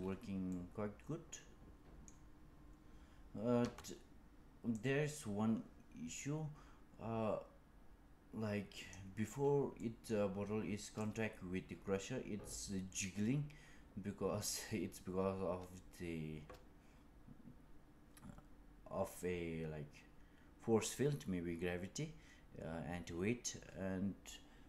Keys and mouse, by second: 0.4-2.1 middle drag, 3.5 space, 4.6-8.8 drag, 9.7 middle click, 10.9-24.6 drag.